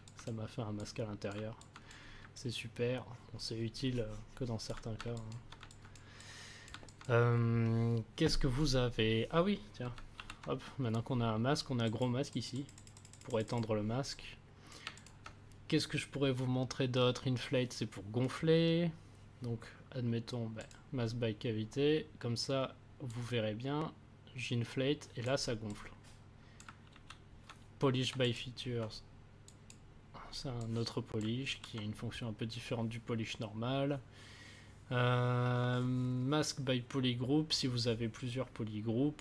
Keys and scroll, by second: 10.1 ctrl+z, 26.9 ctrl+z, 31.4 ctrl+z.